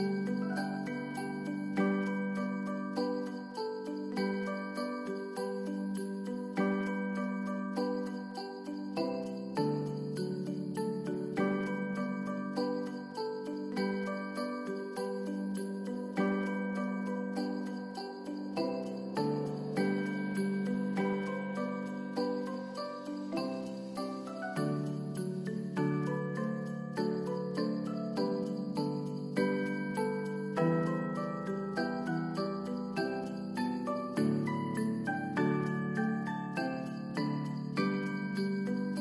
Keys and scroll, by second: 5.0 ctrl+s, 11.6 ctrl+s, 27.2 ctrl+s, 28.2 =, 34.7 F9, 35.5 ctrl+s.